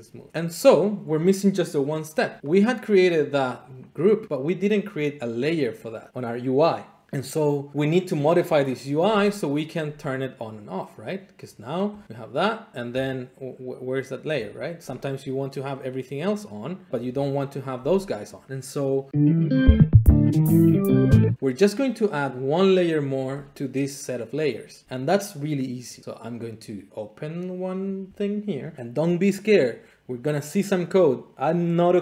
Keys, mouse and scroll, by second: 2.5 click, 3.9 click, 11.4 click, 12.0 click, 16.3 click, 17.0-18.0 drag, 23.2-24.2 drag, 28.5-32.0 drag.